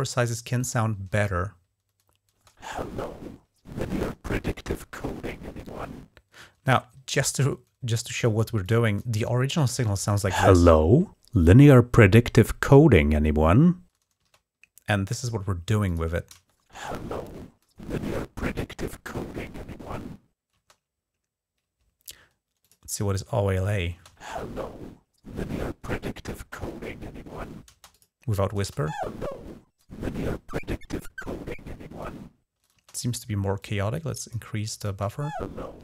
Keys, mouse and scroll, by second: 0.9 space, 2.2 space, 6.5 space, 8.5 click, 9.9 space, 14.0 space, 15.7 click, 16.2 space, 20.4 space, 22.5 click, 23.8 space, 27.5 space, 27.8 click, 28.5 space, 32.6 space, 33.4-34.4 drag, 34.7 space.